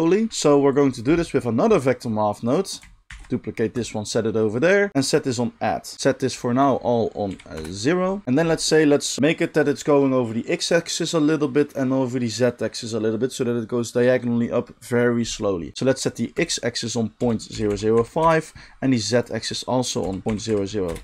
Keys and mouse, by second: 0.3 g, 0.8 middle click, 0.9 click, 1.0-2.4 middle drag, 2.4 click, 2.5-4.9 shift+middle drag, 3.1 shift+d, 5.9 ctrl+z, 5.9-21.0 drag, 8.2 space, 17.7 0, 20.3 0.